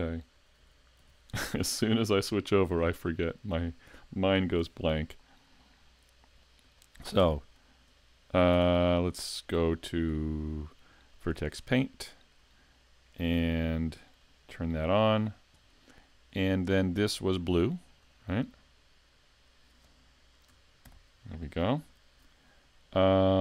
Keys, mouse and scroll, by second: 0.6 l, 1.1 l, 1.7 middle click, 3.0 shift+middle click, 4.6 l, 5.2 scroll down 2, 5.6 middle click, 6.8 shift+middle click, 7.2 Tab, 8.5 Tab, 10.0 click, 11.2 Tab, 11.2 click, 11.8 shift+middle click, 14.2 click, 16.0 shift+middle click, 18.0 click, 20.8 shift+k, 22.1 a.